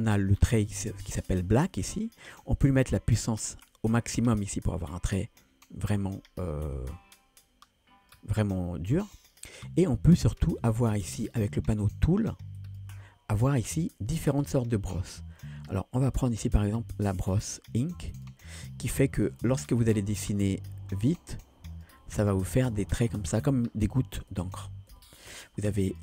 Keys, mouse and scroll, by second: 3.2 click, 4.5-8.2 drag, 12.6 click, 15.8-18.4 drag, 19.3-21.9 drag, 24.4 ctrl+z, 24.6 ctrl+z, 24.9 ctrl+z, 25.9-26.0 drag.